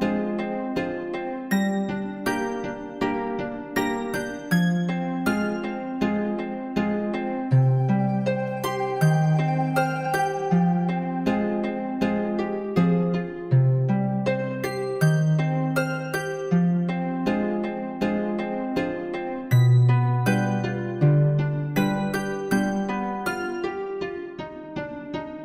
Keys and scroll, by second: 8.3 ctrl++, 13.8 Right.